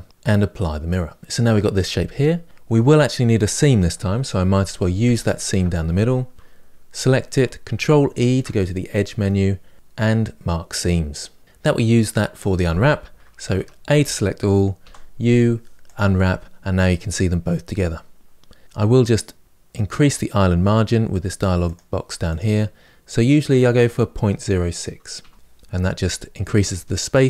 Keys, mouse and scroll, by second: 1.2-4.3 middle drag, 4.3 2, 5.0 alt+click, 11.4-13.3 middle drag, 13.3 a, 15.7 u, 25.3 BackSpace.